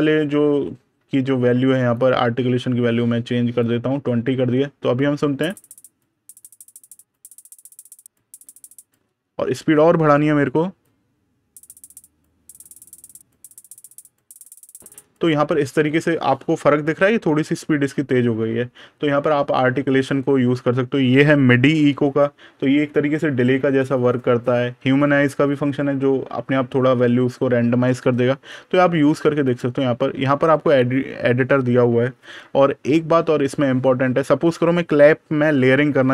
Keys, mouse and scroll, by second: 1.8 click, 3.8 super+KP_Subtract, 5.4 click, 9.6 click, 13.4 click, 21.7 super+KP_Add, 26.0 super+KP_Subtract, 26.8 super+KP_Add, 27.5 super+KP_Subtract, 29.3 click, 29.7 super+KP_Add, 32.7 super+KP_Subtract.